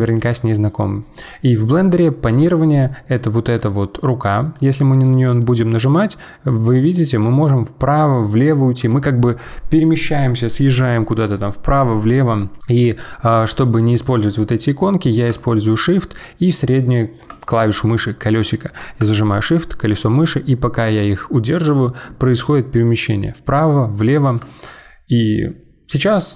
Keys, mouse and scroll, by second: 4.5-7.5 drag, 15.7-18.7 shift+middle drag, 19.4-22.5 shift+middle drag.